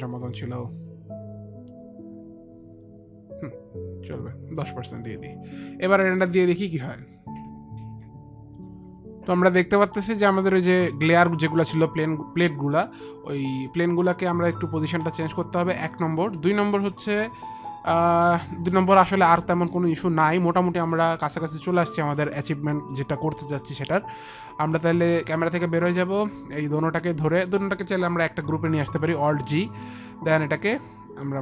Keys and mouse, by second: 0.7 click, 5.0 click, 7.8 ctrl+r, 7.8 click, 8.9 F9, 25.5 click, 27.6 ctrl+click, 29.5 alt+g, 29.5 ctrl+click, 30.9 ctrl+click.